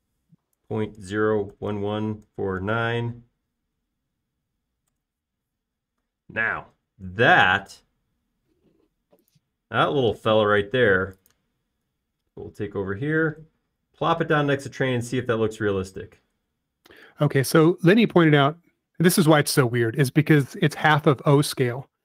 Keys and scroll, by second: 1.3-3.6 typing, 5.9 Return, 11.3 m, 18.6 space.